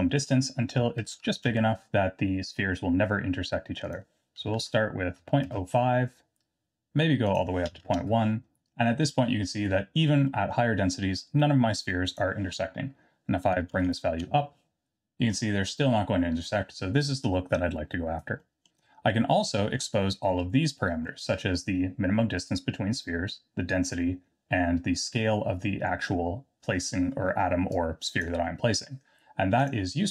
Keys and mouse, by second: 0.0-2.1 drag, 4.0-6.2 drag, 7.3-8.5 drag, 8.8-10.0 middle drag, 10.3 middle drag, 12.2-14.8 drag, 13.9 KP_0, 15.3-15.8 middle drag, 18.5 middle click, 19.5 middle click, 21.0 middle click, 27.7-28.2 drag, 29.6 click.